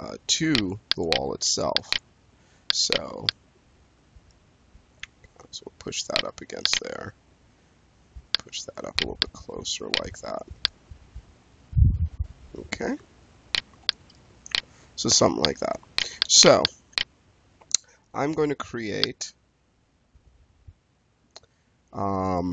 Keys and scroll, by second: 17.5 space.